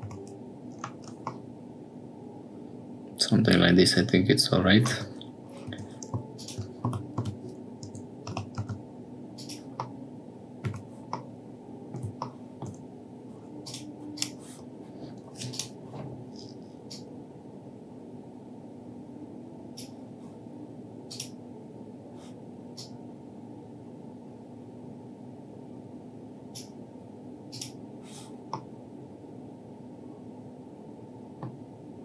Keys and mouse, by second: 0.0 Tab, 1.3-2.9 middle drag, 4.9 Tab, 5.6 2, 6.8 g, 8.2 g, 9.8 middle click, 10.6 Tab, 11.2 middle click, 12.2 shift+middle click, 13.6 click, 14.1 click, 15.5 click, 16.8-19.8 drag, 21.0 click, 22.7-26.5 drag, 27.4 click, 28.6-29.7 middle drag, 29.7 click, 30.3 right click, 30.4-31.8 middle drag.